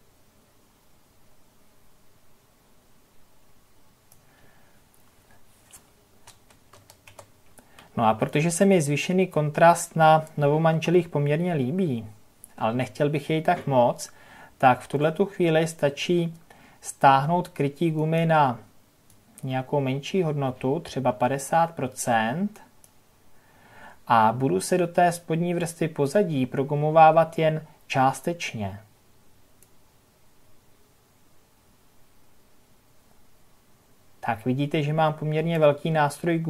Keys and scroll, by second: 6.2 ctrl+KP_Add.